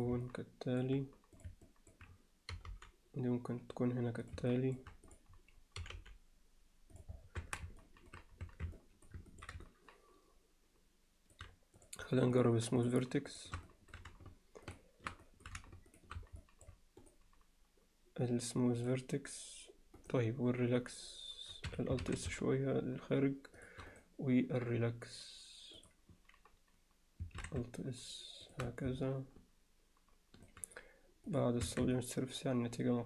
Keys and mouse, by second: 0.3 middle click, 1.4 click, 1.7 alt+middle click, 4.5 alt+middle click, 5.1 click, 7.4 Tab, 7.8 alt+middle drag, 8.5 Tab, 8.8 alt+middle drag, 9.3 middle click, 9.7-11.4 alt+middle drag, 12.4 shift+click, 13.7 middle click, 15.2 alt+middle click, 15.9 shift+click, 16.4 alt+middle click, 22.0 alt+s, 25.2-27.2 right drag, 27.4 alt+s, 29.0-30.5 alt+middle drag, 31.3 click, 31.7 Tab, 32.0-33.0 middle drag.